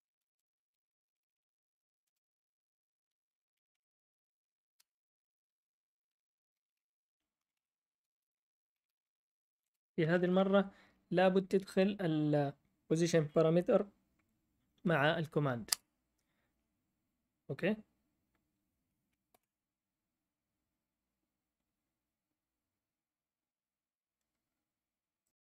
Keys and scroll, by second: 0.0-1.1 typing, 2.1-4.2 typing, 4.7 Return, 5.9-10.8 typing, 15.7 Return, 16.3 Return, 19.3 ctrl+l.